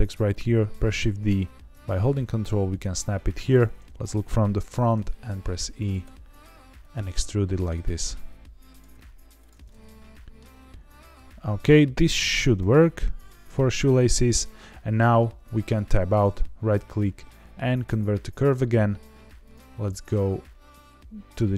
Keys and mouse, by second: 0.8 shift+d, 2.7 ctrl+click, 3.5 KP_1, 4.6 e, 5.7 click, 6.0 e, 6.7 click, 6.9 e, 7.7 click, 7.8 e, 8.6 click, 8.9 e, 9.3 click, 9.6 middle click, 10.9 g, 11.9 ctrl+click, 12.3 click, 12.5 g, 13.1 g, 14.2 click, 15.6 Tab, 16.0-18.5 right drag, 19.4 click.